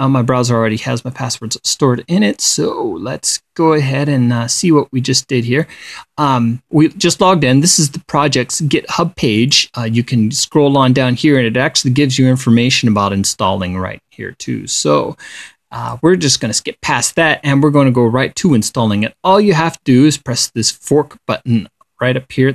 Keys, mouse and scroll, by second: 10.0-10.6 scroll up 1, 10.6 click, 11.2-12.5 scroll up 2, 12.0 click, 12.6 click, 13.0-13.4 scroll up 1, 15.8 click, 16.9 click.